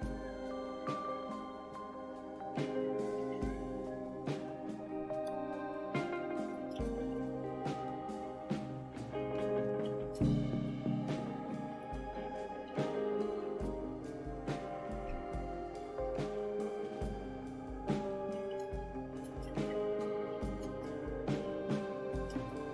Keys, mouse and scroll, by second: 1.3-4.6 typing, 5.9-7.8 typing, 9.6-13.7 typing, 18.4-22.7 typing.